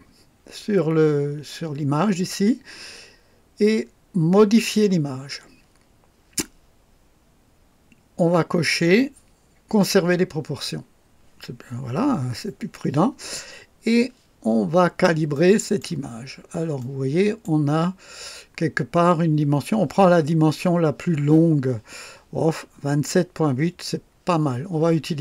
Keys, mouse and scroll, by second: 4.6 click, 14.6-14.9 scroll up 1, 15.3 right click, 16.1 scroll down 1, 16.8-17.6 right drag, 17.8 scroll down 1.